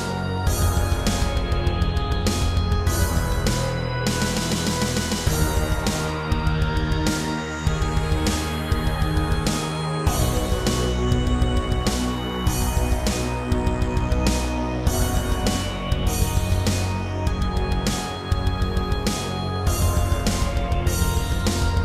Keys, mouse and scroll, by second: 2.2 typing, 3.6 click, 4.2 typing, 5.2 click, 5.6 scroll down 3, 5.8 shift+middle click, 7.0 ctrl+r, 7.6 click, 7.9 double click, 9.0-9.3 typing, 13.2 Escape, 13.9 ctrl+Tab, 14.8 ctrl+Tab, 17.0 click, 19.9 click, 20.4 shift+middle click, 21.4 typing, 21.7 click.